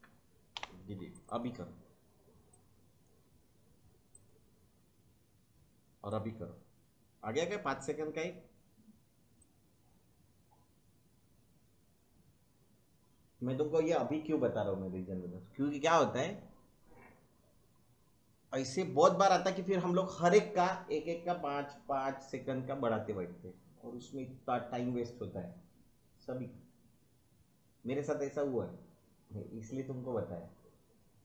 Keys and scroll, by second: 0.5 Delete.